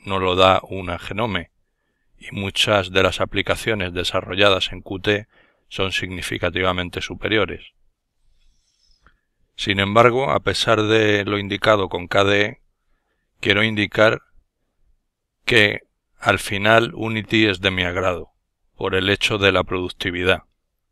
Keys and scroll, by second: 3.9 Left, 5.4 Right, 5.4 Down, 11.0 Right, 14.2 Left.